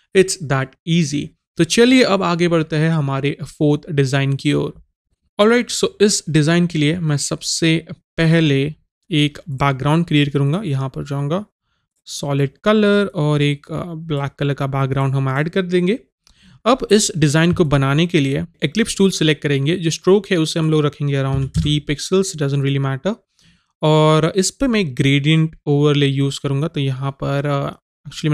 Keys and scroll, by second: 21.4 KP_3.